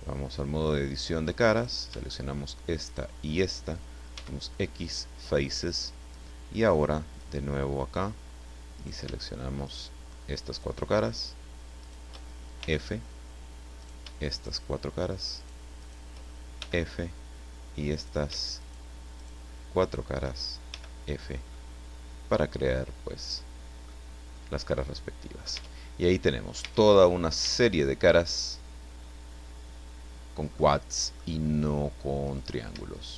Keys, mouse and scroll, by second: 0.6 click, 1.6 right click, 2.9 shift+right click, 4.2 x, 4.8 click, 7.1 click, 8.8 right click, 9.6 shift+right click, 10.5 shift+right click, 11.8 shift+right click, 12.6 shift+f, 13.8 shift+right click, 14.3 shift+right click, 15.4 shift+right click, 15.8 shift+right click, 16.6 shift+f, 17.9 right click, 18.6 shift+right click, 19.2 shift+right click, 19.8 shift+right click, 20.7 shift+f, 21.2 scroll down 1, 21.5-24.0 middle drag, 24.7 middle click, 25.6 Tab, 25.8-26.1 scroll down 1, 26.1 middle click, 26.6 Tab, 26.8-27.3 scroll up 2, 27.4 a, 28.2-29.7 middle drag, 30.2 middle click, 31.1 middle click, 31.4-31.7 scroll up 1, 32.2 right click.